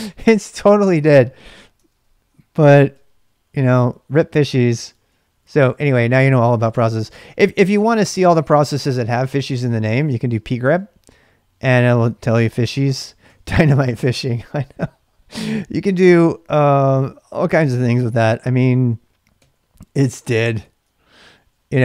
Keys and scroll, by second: 2.5 ctrl+b, 2.9 typing, 4.2-5.4 typing, 7.2-11.2 typing, 13.3 ctrl+[, 13.5 k, 16.2-17.5 typing, 19.4 typing, 20.6 ctrl+v, 21.0-21.8 typing.